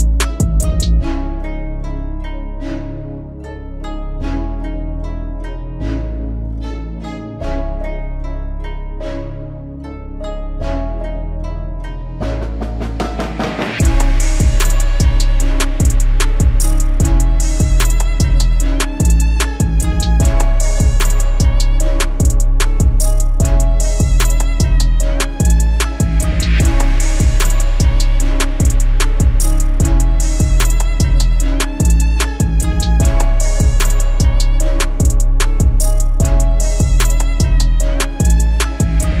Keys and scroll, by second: 2.7 ctrl+e, 12.3 ctrl+d, 15.7 ctrl+t, 32.2 ctrl+t, 35.6 ctrl+j, 36.1 ctrl+t.